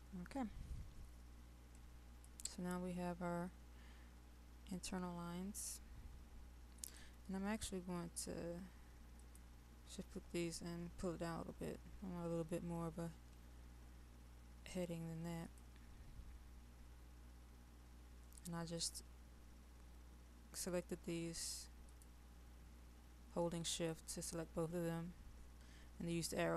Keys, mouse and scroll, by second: 1.8 click, 9.2 shift+click, 12.0 Down, 15.5 click, 21.9 shift+click, 23.7 shift+click.